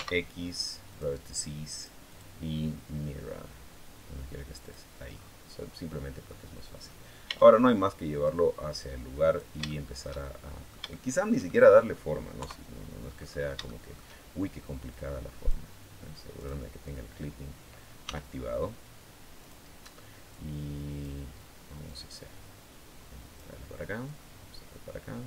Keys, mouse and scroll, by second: 0.7 click, 1.6 click, 4.4 click, 5.0 middle click, 5.4 middle click, 7.0 Tab, 8.0-9.4 drag, 9.4-11.8 shift+middle drag, 12.2 KP_3, 12.9-13.2 scroll up 2, 13.4 shift+middle click, 13.7 shift+scroll up 2, 14.7 click, 16.2 click, 16.4-17.8 middle drag, 17.8 s, 19.2 click, 20.1 click, 21.6-23.3 drag, 23.8-25.2 drag.